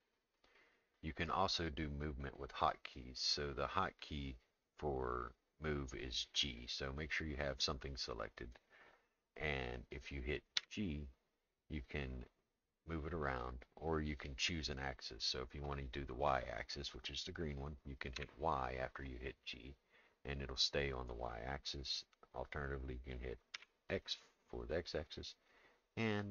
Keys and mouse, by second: 10.6 g.